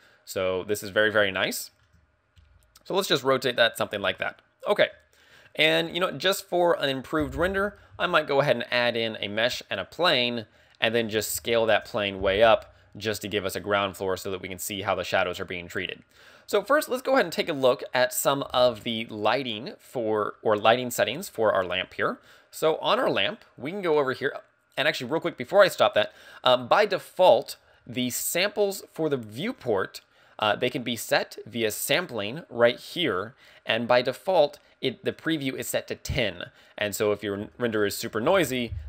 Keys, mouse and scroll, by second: 1.0 right click, 1.5 shift+middle click, 2.4 r, 3.7 click, 4.7 shift+middle click, 5.8 scroll down 2, 7.5 shift+a, 10.4 shift+a, 11.9 s, 17.8 scroll up 1, 18.6 KP_1, 19.1 scroll up 1, 19.1 KP_1, 21.9 right click, 31.6 click, 37.5 ctrl+click.